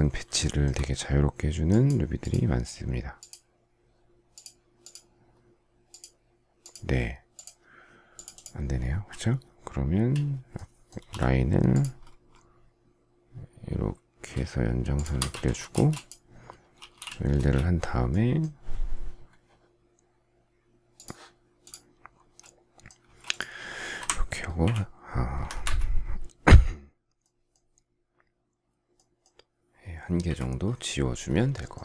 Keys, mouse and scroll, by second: 0.4 shift+middle click, 14.9 shift+click, 15.4 space, 16.7 shift+w, 17.3 space, 23.0 space, 24.6 Delete, 25.6 Escape, 30.2 Delete, 31.5 shift+middle click.